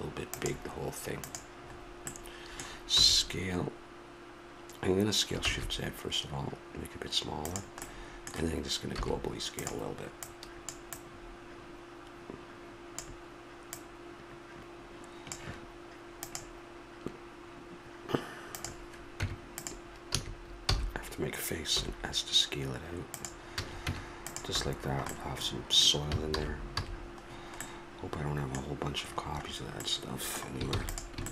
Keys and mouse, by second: 1.2-6.5 drag, 3.0 s, 8.9 s, 10.2-15.0 drag, 19.1 Tab, 20.1 a, 20.6 f, 23.6 a, 23.9 Tab, 24.5 a, 26.3 alt+h, 26.7 a, 30.7 ctrl+s.